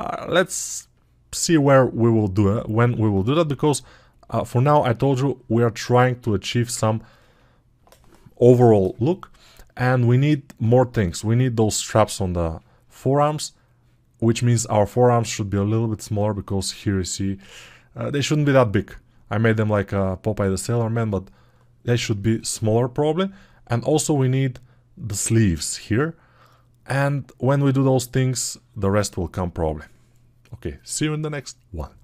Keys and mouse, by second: 6.8-9.8 alt+right drag, 9.8-32.0 drag.